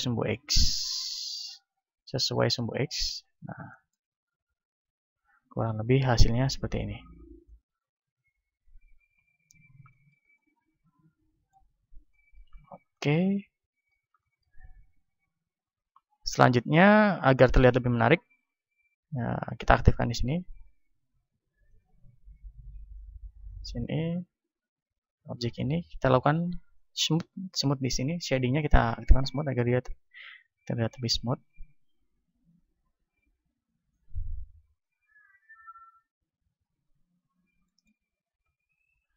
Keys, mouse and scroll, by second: 0.0-3.3 drag, 3.3-5.2 middle drag, 4.6 a, 5.2-7.2 drag, 5.2-7.2 right drag, 6.6 a, 7.2-9.0 middle drag, 9.6-19.4 middle drag, 15.2 KP_1, 19.4-24.7 drag, 24.7-27.0 right drag, 27.0-28.6 middle drag, 29.6-31.6 drag, 29.6-31.6 right drag, 37.0 t, 37.2 middle click, 38.2 a.